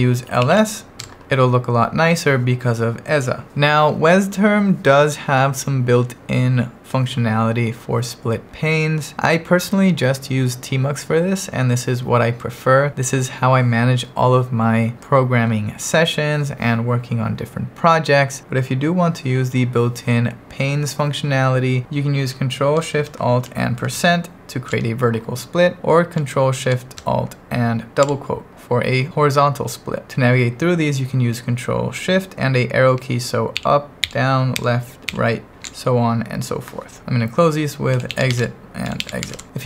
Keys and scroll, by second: 0.2-1.0 typing, 23.8 ctrl+alt+shift+5, 25.8 Return, 28.1 ctrl+alt+shift+', 33.6 ctrl+shift+Up, 34.0 ctrl+shift+Down, 34.6 ctrl+shift+Left, 35.1 ctrl+shift+Right, 37.7-39.6 typing.